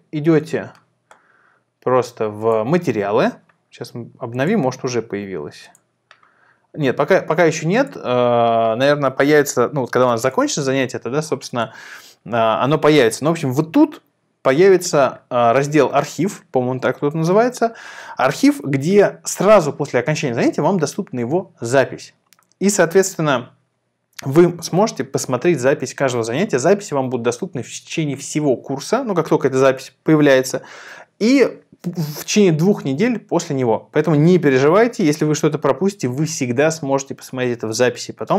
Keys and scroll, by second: 8.1 Return.